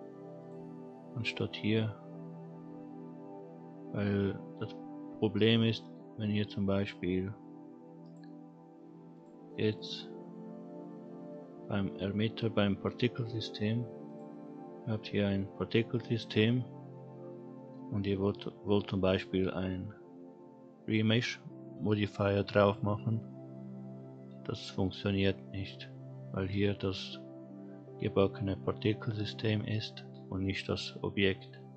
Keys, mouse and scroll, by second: 0.4 click, 1.6-3.8 drag, 4.5 scroll down 2, 5.7-8.0 scroll down 2, 8.0 click, 9.1 click, 9.7 click, 14.0 click, 14.7-15.2 scroll up 1, 19.0-22.7 drag.